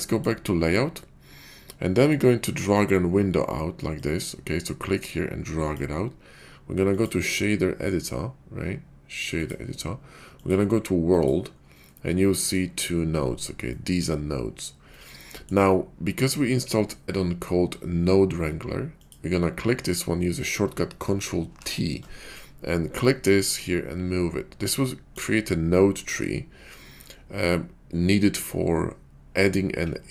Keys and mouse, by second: 0.0 click, 4.0-5.8 drag, 6.8-9.4 drag, 10.4-11.3 drag, 12.1 middle click, 13.9 middle click, 15.1 middle click, 19.0 click, 21.5 ctrl+t, 23.1-25.1 drag.